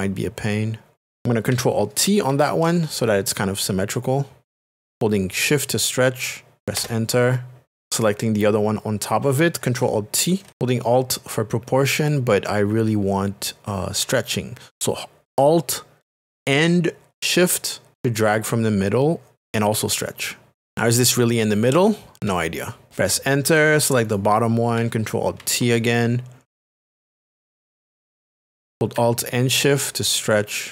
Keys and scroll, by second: 3.1 alt+t, 6.8 Return, 22.9 Return, 26.8 alt+t.